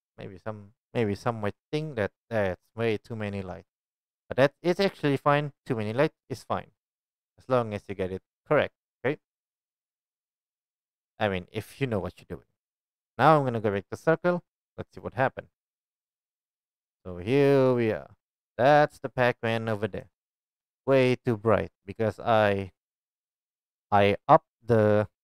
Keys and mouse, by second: 11.1-25.2 drag.